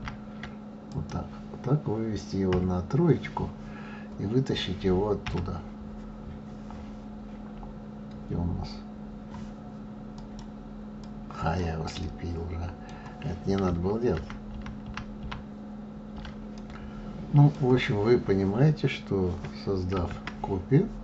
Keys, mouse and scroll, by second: 0.0 ctrl+z, 0.9 click, 2.5 KP_3, 5.2 g, 10.1 click, 11.0 click, 12.0-14.2 middle drag, 14.2 ctrl+z, 14.5 ctrl+z, 14.8 ctrl+z, 15.2 ctrl+z, 16.5-19.5 middle drag, 19.9 shift+d.